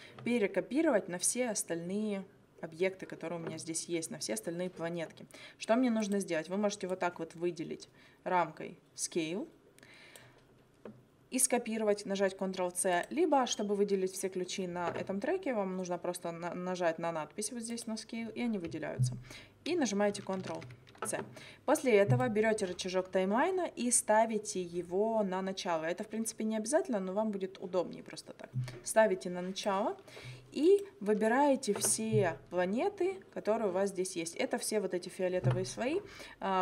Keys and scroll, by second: 20.4 ctrl+c.